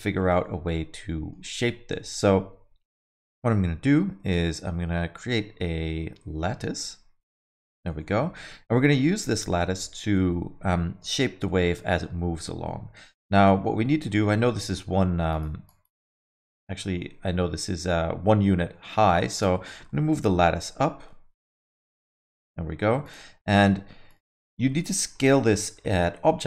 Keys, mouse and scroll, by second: 0.1 scroll down 4, 0.4 alt+middle click, 1.7 shift+a, 7.7 alt+middle click, 8.0 middle click, 8.3 alt+middle click, 9.0 alt+middle click, 9.4 middle click, 11.4 middle click, 11.7 alt+middle click, 12.9 KP_1, 13.8-14.1 scroll up 4, 14.1 middle click, 14.4 scroll up 3, 14.6 middle click, 15.3 click, 15.6 click, 19.3 click, 20.1 g, 23.3 s, 24.5 alt+middle click, 24.8 middle click, 25.2 alt+middle click, 25.5 scroll down 3, 25.8 alt+middle click, 26.1 middle click, 26.3 scroll down 2.